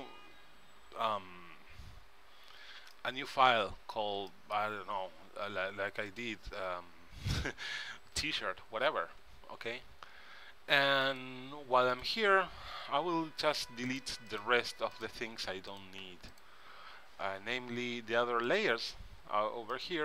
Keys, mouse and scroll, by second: 0.0 Return, 6.2-8.0 drag, 11.2 click, 13.0 x, 13.8 click, 14.5-17.8 drag, 14.8 x, 16.2 x, 18.6-20.0 right drag.